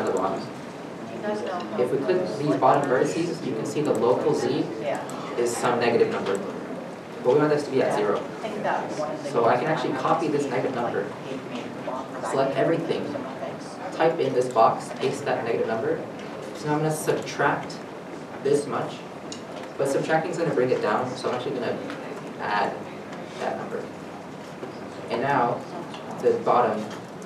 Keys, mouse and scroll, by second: 0.3 scroll down 1, 0.6 a, 11.3 ctrl+c, 13.2 a, 15.2 a, 15.6 ctrl+v, 22.1 ctrl+v, 22.3 BackSpace, 23.4 shift+=, 23.5 Return, 25.1 shift+middle click.